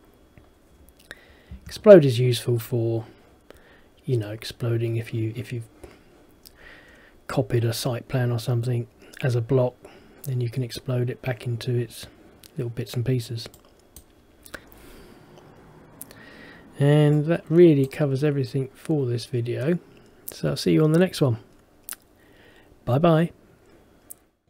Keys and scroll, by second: 1.6 Escape.